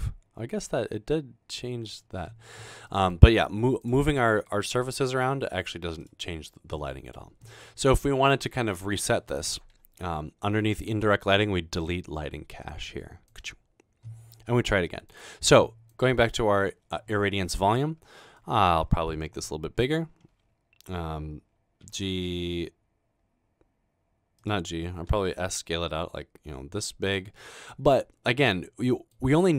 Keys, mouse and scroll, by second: 4.8 g, 13.3 click, 15.1 click, 15.9 click, 17.5 middle click, 18.1-18.6 scroll down 1, 22.0 typing, 25.1 typing, 27.0 click, 27.4-27.7 middle drag, 27.9 scroll down 1.